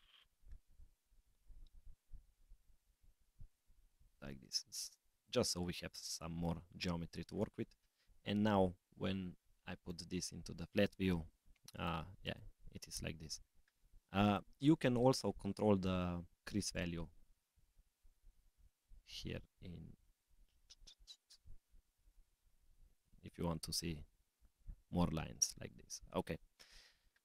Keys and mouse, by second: 5.9 Tab, 7.3 click, 9.7-11.1 drag, 11.7 click, 12.2 click, 14.2 click, 16.7 click, 21.3 click, 22.3-24.7 drag, 25.5-26.7 middle drag.